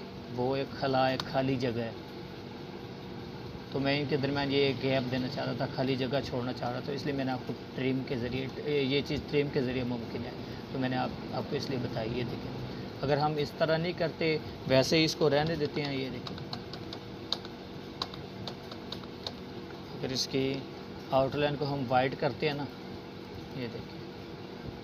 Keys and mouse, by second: 0.9 space, 1.2-1.5 drag, 5.2-6.2 drag, 10.5 ctrl+z, 16.4 click.